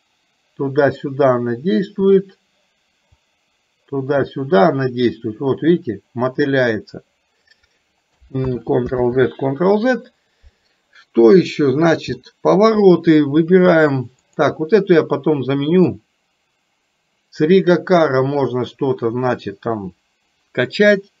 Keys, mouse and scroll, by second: 3.2-7.5 drag, 8.6 ctrl+z, 9.0 ctrl+z, 12.2 middle click, 14.4 click, 16.0-21.2 drag.